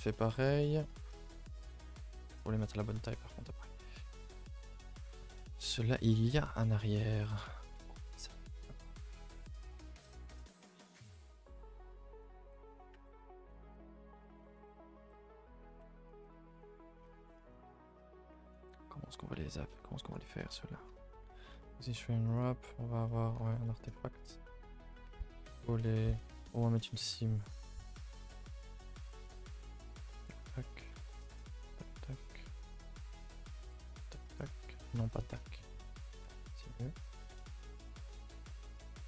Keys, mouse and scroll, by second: 0.2 a, 0.7 a, 0.9 a, 1.2 shift+middle drag, 1.4-1.8 scroll up 2, 1.8 shift+middle click, 2.4 scroll down 1, 4.9 a, 5.1 a, 5.2-7.0 middle drag, 7.0-8.8 scroll down 1, 8.8 l, 9.1 l, 10.4-12.4 typing, 13.5 ctrl+i, 13.7 h, 14.4 Tab, 16.1 ctrl+i, 16.3 h, 16.5 Tab, 17.0 middle click, 17.7-18.0 scroll up 5, 18.0 middle click, 18.5-18.8 scroll up 1, 18.8-20.4 middle drag, 20.4-20.9 scroll up 2, 20.9 a, 22.4 u, 23.1 middle click, 23.4 a, 23.5 a, 23.6-24.8 middle drag, 24.8 click, 25.1 a, 25.2 a, 25.7 middle click, 26.1 2, 26.4-27.5 middle drag, 27.5 alt+click, 27.7 middle click, 28.3 alt+click, 28.6-29.9 middle drag, 29.9 shift+click, 30.3 shift+click, 31.0 alt+shift+click, 31.5 shift+click, 31.7 shift+click, 32.0 middle click, 32.7 alt+shift+click, 32.9-33.8 scroll up 5, 33.8 shift+click, 34.1 shift+click, 34.4 scroll down 3, 34.7-35.2 scroll up 4, 35.2 shift+click, 35.4-36.2 scroll up 1, 36.2 shift+click, 36.4-36.8 scroll down 3, 36.8 shift+middle click, 37.0-37.3 scroll down 3, 37.4 shift+middle click, 37.8-38.1 scroll up 2, 38.1 middle click, 38.6 scroll up 2, 38.9 middle click.